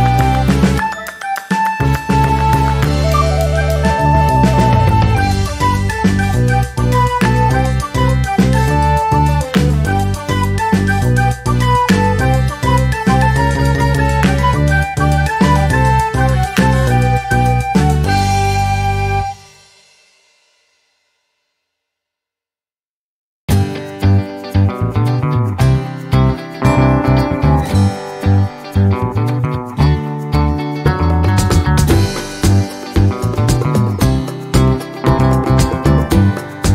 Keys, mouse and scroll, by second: 1.5 ctrl+d, 1.8-3.2 ctrl+drag, 3.9 click, 4.5 click, 5.2-8.3 drag, 8.5 shift+click, 9.4 ctrl+-, 11.0 click, 12.1 click, 13.0 Delete, 14.5-17.2 drag, 18.2 click, 21.4 click, 22.2-23.5 ctrl+shift+drag, 24.0 ctrl+shift+click, 24.6-27.0 ctrl+shift+drag, 27.5-29.0 ctrl+shift+drag, 29.7 click, 30.6 shift+click, 31.2-32.7 shift+drag, 33.3 click, 34.1-35.8 drag, 36.4 click.